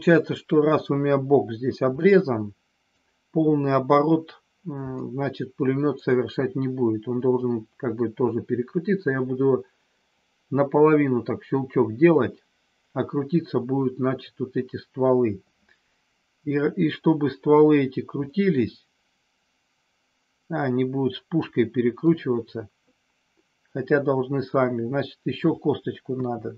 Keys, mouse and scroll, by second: 0.1 middle click, 1.9-2.9 middle drag, 5.0 scroll up 1, 5.1 middle click, 18.2-22.0 middle drag, 26.1 KP_1.